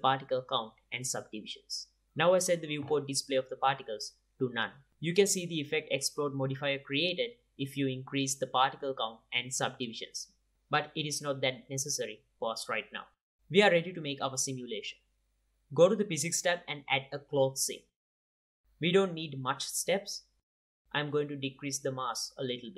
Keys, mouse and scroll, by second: 0.4-0.7 drag, 0.7 middle click, 1.0 click, 1.7 middle click, 1.9 Tab, 1.9 Tab, 2.1-2.6 middle drag, 3.0 click, 3.9-4.7 drag, 4.7 middle click, 5.3 click, 5.3 KP_7, 5.3 middle click, 6.1 click, 7.9-9.3 drag, 9.5-11.5 middle drag, 12.1-13.0 middle drag, 13.4-14.9 drag, 15.8-18.9 drag, 19.8-22.7 drag.